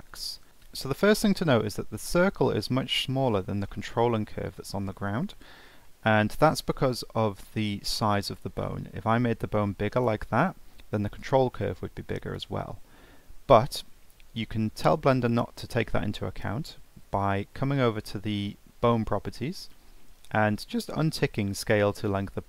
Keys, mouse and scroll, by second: 0.5-2.8 scroll down 2, 2.9-5.5 middle drag, 5.5-5.9 scroll down 2, 5.9-7.1 middle drag, 7.1 Tab, 8.2 click, 9.1 s, 10.4 Tab, 12.7 ctrl+z, 13.8 ctrl+z, 14.8 scroll up 1, 15.0-18.5 middle drag, 18.5 Tab, 19.5-22.4 scroll down 4.